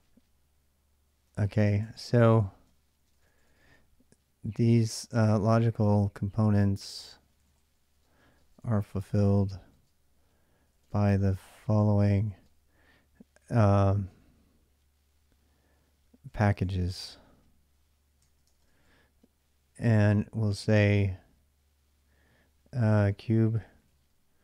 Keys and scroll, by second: 1.0-12.6 typing, 1.3 Return, 2.4 Return, 16.0-16.8 typing, 18.0-20.2 typing, 22.4-24.4 typing.